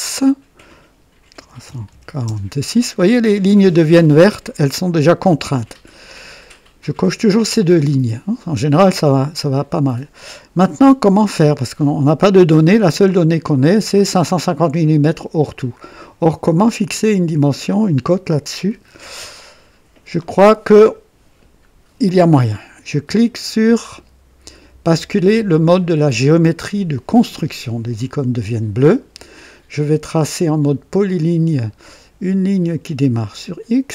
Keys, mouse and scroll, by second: 0.1 click, 1.1-1.9 typing, 2.2 KP_Enter, 8.7-9.6 right drag, 9.9 scroll up 1, 12.5 scroll down 2, 13.1 scroll down 2, 15.7-16.0 scroll up 2, 16.2-16.5 scroll up 2, 18.8-19.2 scroll down 2, 27.1 click, 31.0 click, 33.4 click.